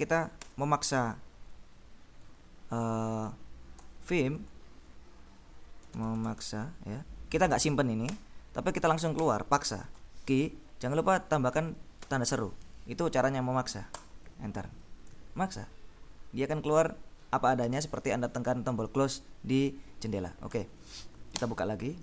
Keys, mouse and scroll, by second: 0.5 Escape, 2.3 Return, 3.2 a, 3.9 Return, 5.6-7.1 typing, 8.1 Escape, 9.3 shift+;, 10.1 q, 12.0 shift+1, 14.0 Return, 20.8 Up, 21.5 Return.